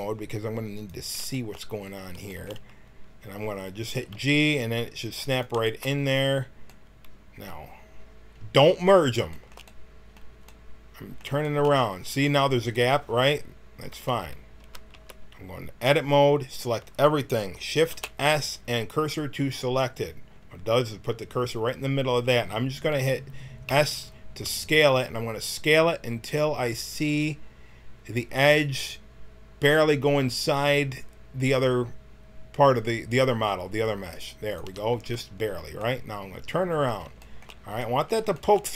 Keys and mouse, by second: 1.6 middle click, 2.4-4.1 middle drag, 4.1 g, 13.9 Tab, 14.6 a, 14.9 a, 17.8 shift+s, 20.3-21.4 middle drag, 23.6 s, 36.7 middle click, 37.7-38.7 middle drag.